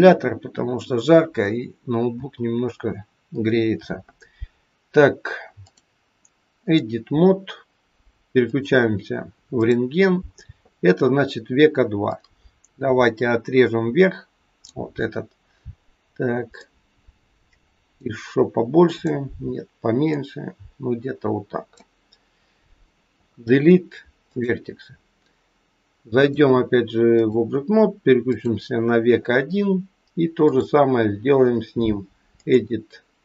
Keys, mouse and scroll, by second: 5.7 click, 8.4 click, 9.5 click, 12.0 click, 16.5 click, 18.9 click, 20.0 click, 23.0 Delete, 26.3 click, 28.3 click.